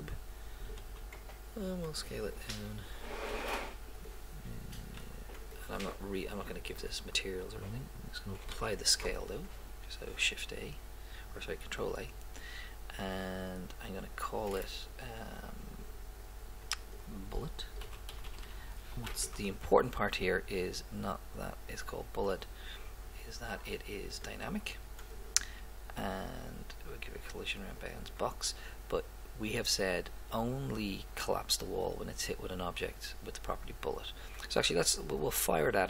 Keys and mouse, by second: 0.8 s, 3.3 g, 5.1 s, 8.6 ctrl+a, 14.5-16.6 middle drag, 16.9-18.8 drag, 18.6 l, 21.7-22.8 drag, 27.6-29.5 drag, 30.3-32.1 drag.